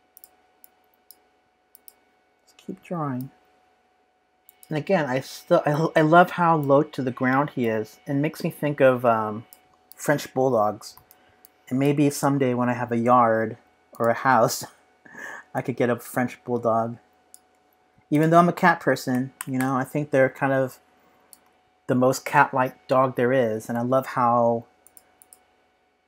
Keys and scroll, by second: 10.9 z, 12.5 p.